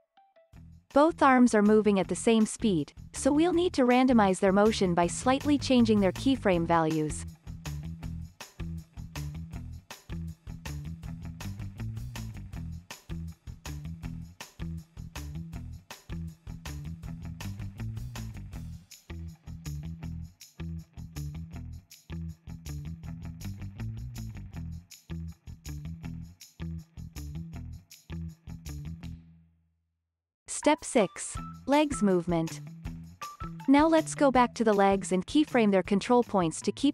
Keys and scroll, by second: 20.4 super+s, 22.3 super+s, 23.4 space, 25.4 space, 26.4 space, 28.2 space, 28.6 super+s.